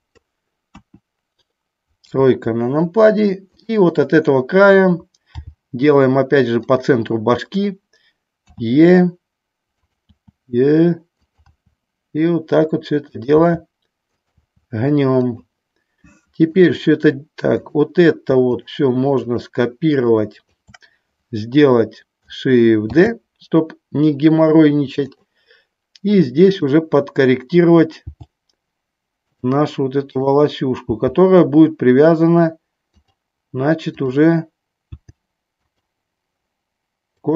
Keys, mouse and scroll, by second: 0.8 KP_1, 3.7 click, 5.6 g, 8.6 e, 9.9 click, 10.2 e, 13.3 click, 13.4 e, 14.4 click, 14.5 e, 16.6 click, 17.7 click, 18.7 shift+click, 19.5 shift+click, 20.4 shift+click, 23.1 shift+d, 25.2 click, 26.6 click, 28.2 g, 29.5 click, 30.2 click, 34.0 click, 35.1 g, 37.2 click.